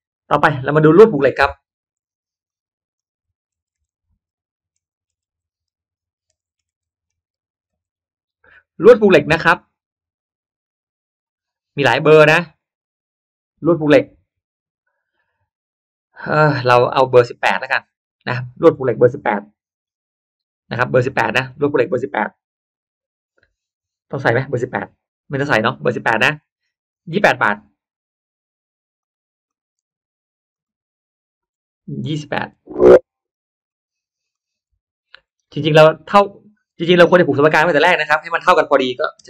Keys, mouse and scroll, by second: 0.2 click, 1.9 click, 2.4 click, 3.5 BackSpace, 3.7 BackSpace, 5.1 BackSpace, 6.3 BackSpace, 7.3 f, 7.6 Return, 28.9 click, 29.4 click, 30.5 click, 32.3 8, 33.6-34.6 drag, 35.9 8, 38.1 Return, 38.3 Return, 38.9 2, 39.2 8.